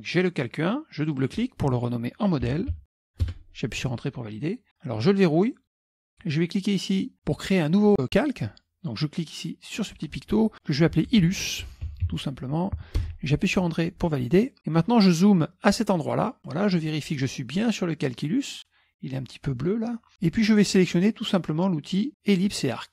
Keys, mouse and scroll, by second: 1.1 click, 2.3-3.5 typing, 5.7 click, 9.9 click, 10.9-12.6 typing, 13.1 Return, 14.2 middle click, 15.1 middle click, 15.3-15.9 scroll up 1, 15.9 middle click, 16.4 middle click.